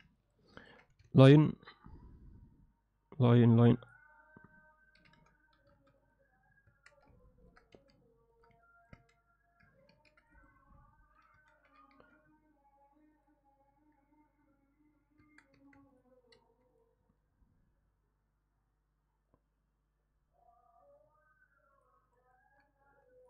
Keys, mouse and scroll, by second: 0.2 ctrl+middle click, 0.5 ctrl+alt+middle click, 0.6 ctrl+alt+click, 1.1 shift+a, 5.0 r, 6.7 Tab, 7.3 ctrl+alt+middle click, 7.8 s, 8.6 ctrl+alt+middle click, 9.9 ctrl+r, 11.4 a, 11.7 g, 15.2 Tab, 15.6 Tab, 16.4 i, 22.1 click, 22.3 click, 22.9 x.